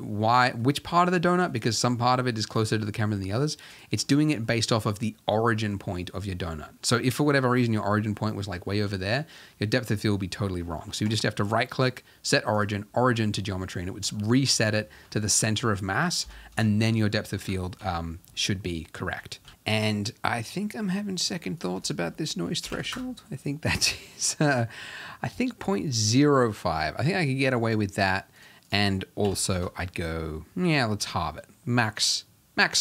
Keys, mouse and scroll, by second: 0.0 z, 0.3-3.8 middle drag, 3.8 click, 4.0-6.7 middle drag, 6.7-7.4 scroll down 2, 7.4-7.9 scroll down 4, 7.9 middle click, 8.9-10.2 scroll down 1, 10.2-10.6 scroll down 1, 10.6-11.7 scroll up 10, 12.7-13.0 right drag, 13.0 middle drag, 13.2-14.1 scroll up 4, 14.1-16.5 middle drag, 16.5 KP_0, 18.2 z, 19.4 alt+a, 19.5-22.9 shift+middle drag, 22.9-24.3 drag, 24.3 scroll up 1, 29.5-31.4 drag, 31.4 z.